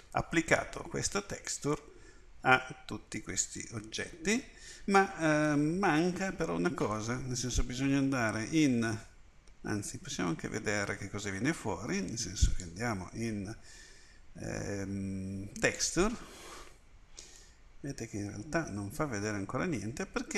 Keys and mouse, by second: 7.6 Tab, 9.7 Tab, 12.5 click, 17.4 middle click.